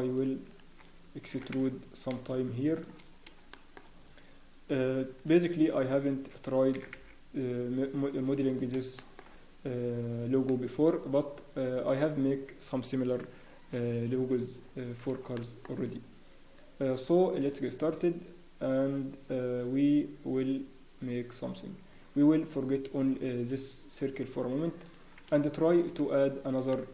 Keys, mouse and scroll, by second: 1.5 e, 3.1 scroll down 1, 3.8 shift+middle click, 3.8 scroll down 4, 4.6 click, 5.1 shift+click, 5.1-6.3 scroll up 3, 6.3 shift+click, 6.7 e, 8.5 scroll down 1, 8.9 shift+middle click, 9.2 scroll down 4, 10.0 scroll down 1, 10.4 shift+middle click, 10.4 scroll up 3, 11.0 scroll down 1, 11.5-13.1 scroll down 1, 13.4-14.1 scroll, 14.1 scroll down 1, 15.3 shift+middle click, 18.3-18.7 scroll down 1, 18.8 scroll up 1, 20.9 scroll down 2, 21.9 Tab, 23.4 click, 23.4 scroll down 1, 26.7 shift+middle click.